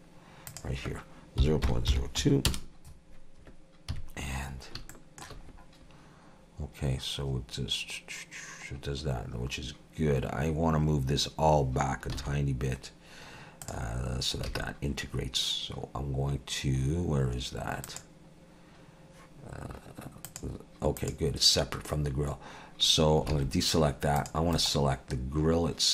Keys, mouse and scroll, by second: 0.5 click, 3.9 KP_3, 4.5 scroll up 2, 4.9 shift+middle click, 5.5-6.9 scroll up 2, 8.7-10.9 scroll down 2, 12.2 alt+a, 13.6 click, 14.5 alt+a, 17.9 click, 20.3 click, 21.0 click, 23.3 alt+a, 24.2 click, 24.5 right click.